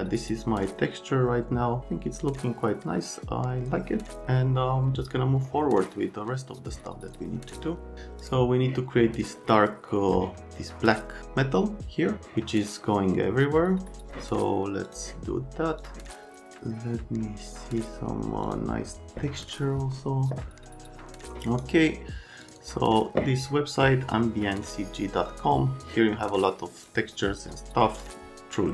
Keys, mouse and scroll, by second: 7.5 click, 8.2 click, 9.4 click, 13.9 middle click.